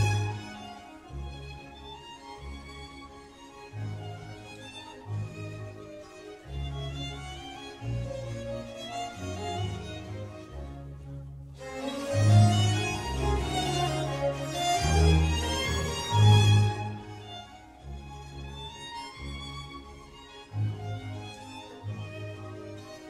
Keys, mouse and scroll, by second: 3.6-5.5 drag, 6.2 shift+click, 10.7 Return, 11.5 click, 12.1 click, 12.9-14.1 scroll up 1, 14.1 s, 15.7-16.6 middle drag, 16.6 click, 17.9 click, 18.6 click, 19.1-20.2 middle drag, 20.2 click, 20.7-21.5 middle drag, 21.5 click, 22.2-22.8 scroll up 2, 22.8-23.0 scroll down 1.